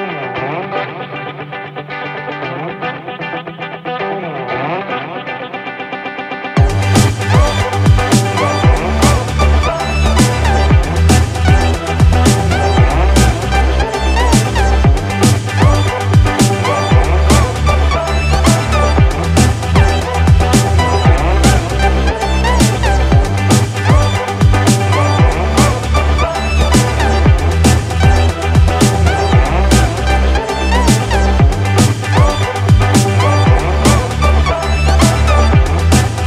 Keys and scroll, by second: 0.2 ctrl+=.